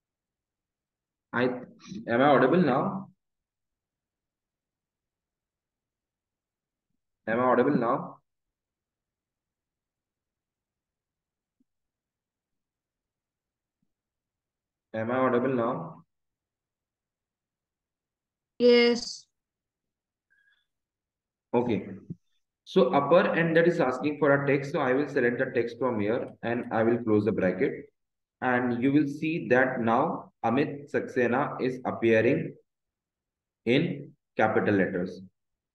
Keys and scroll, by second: 28.0 Return, 29.9 Left, 33.9 Up, 34.5 Right.